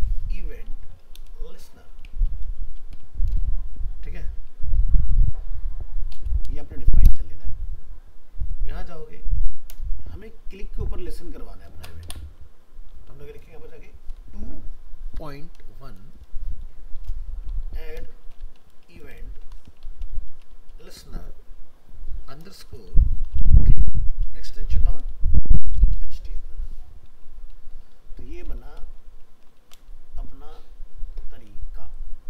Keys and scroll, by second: 29.6 ctrl+c.